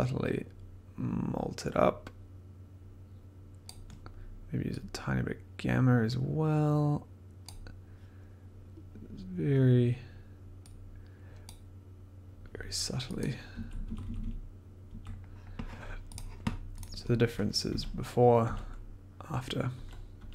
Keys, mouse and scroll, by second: 0.3 click, 3.6-5.3 drag, 7.4 click, 11.4 click, 13.2 click, 13.5-14.2 scroll down 4, 14.8 scroll down 1, 16.1 click, 16.8 click, 17.7 d, 18.4 d, 19.7 d.